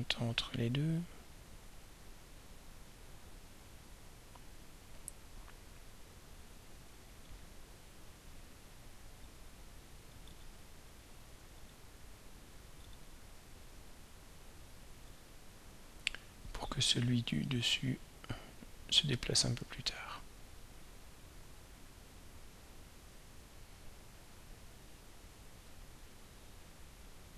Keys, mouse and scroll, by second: 10.3 right click, 11.6 click, 12.9 right click, 15.1 click, 17.4 click, 21.5-23.2 drag, 24.4-25.8 drag, 26.9 click.